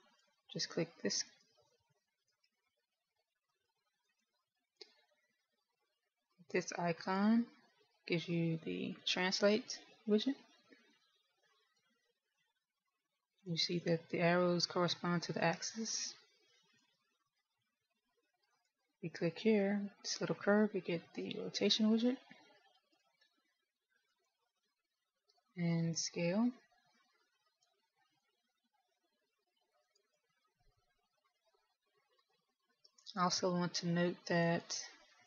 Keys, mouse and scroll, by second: 0.9 click, 2.4 click, 3.4 click, 4.4 click, 5.0 click, 7.9 click, 9.9 click, 13.4 click, 16.4 click, 19.4 click, 22.2 click, 25.0 click, 26.6 click, 29.3 click, 33.3 ctrl+z.